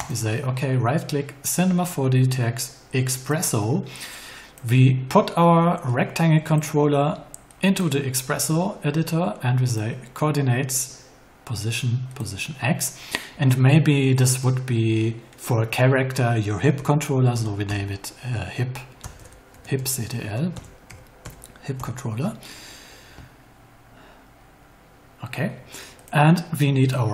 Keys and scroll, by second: 16.7 h, 17.3 i, 17.6 p, 19.1-21.2 typing, 21.7 Return.